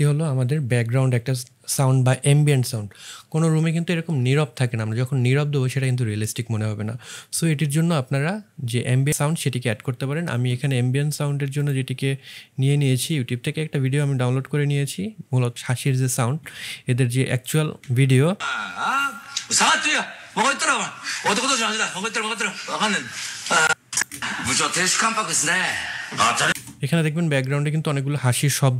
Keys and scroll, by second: 17.7 space, 24.0 space.